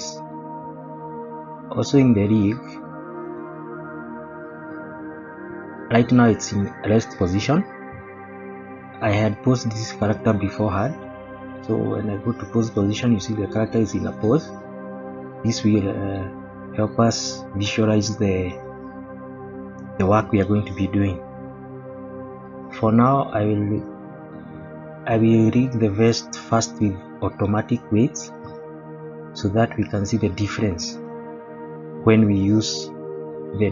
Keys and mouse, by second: 0.6 middle click, 2.2 click, 9.0-9.3 shift+middle drag, 11.5 click, 13.0-14.3 middle drag, 16.1 click, 17.3 middle drag, 17.8 shift+middle click, 18.5 middle click, 19.3 shift+middle click, 20.6-21.6 middle drag, 24.2 click, 25.5 shift+middle click, 31.2 middle drag.